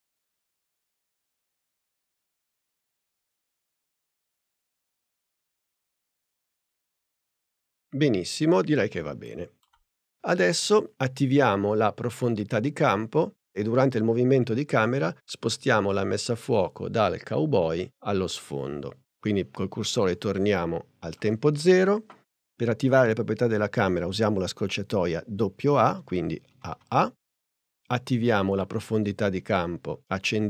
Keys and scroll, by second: 26.5 a.